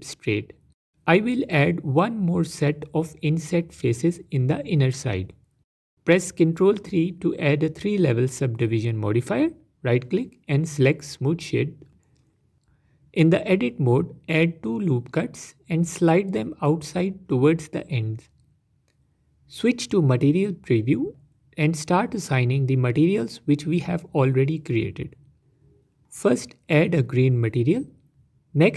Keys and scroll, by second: 1.2 i, 5.1 Tab, 7.8 ctrl+3, 11.8 Tab, 15.3 ctrl+r, 20.3 Tab, 22.1 z.